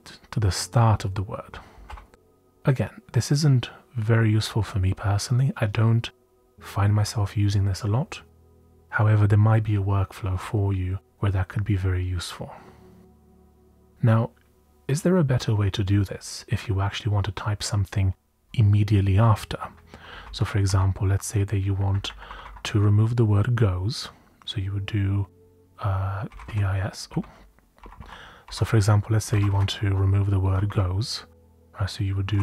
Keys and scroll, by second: 1.8 u, 9.6 typing, 19.9-21.1 typing, 21.8 Left, 21.9 Left, 22.0 Left, 22.2 Right, 22.4 Right, 26.0-32.4 typing.